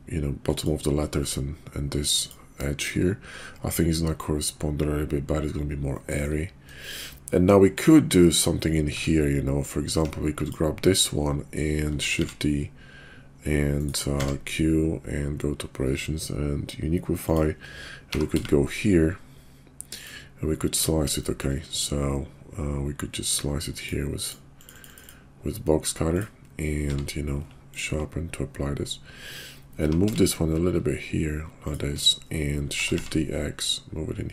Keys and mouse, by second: 2.6 click, 6.0 shift+middle drag, 6.8 shift+click, 8.9 Tab, 9.8 Tab, 11.9 shift+d, 14.1 q, 18.1 g, 21.2 shift+drag, 23.3 click, 25.0 click, 26.0 click, 26.8 q, 29.7 g, 32.7 shift+d.